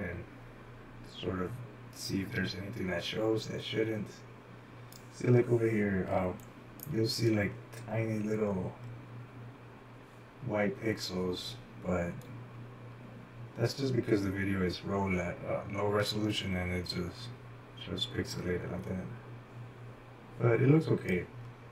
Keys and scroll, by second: 6.2-6.9 typing.